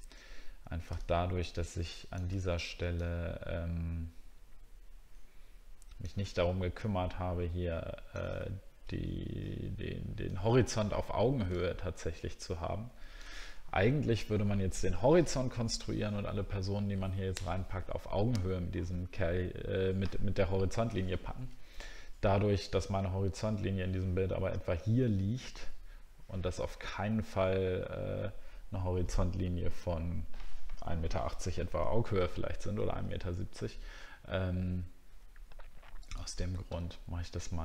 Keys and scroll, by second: 8.5 alt+scroll down 1, 10.5-11.5 alt+scroll down 1.